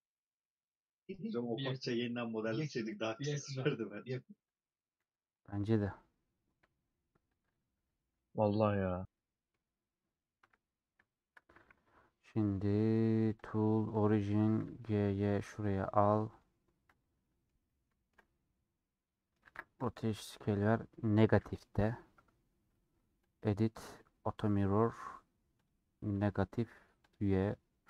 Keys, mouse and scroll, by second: 0.4-1.5 middle drag, 1.6-6.2 drag, 6.2-7.5 scroll down 2, 7.5 shift+click, 7.9 j, 8.0-10.4 middle drag, 10.4 KP_7, 11.1 shift+middle click, 11.5 Tab, 13.9-17.2 drag, 17.2-19.4 middle drag, 19.4 ctrl+a, 20.2-26.3 middle drag, 26.3-27.8 drag, 27.8 scroll down 2.